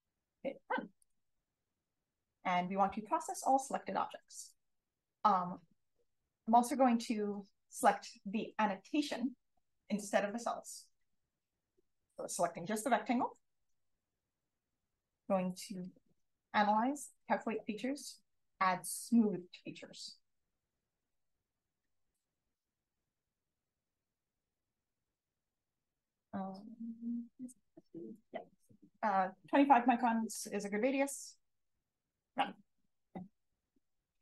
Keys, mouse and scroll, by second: 1.0 click, 4.3 click, 5.9-20.5 drag, 32.3-34.2 drag.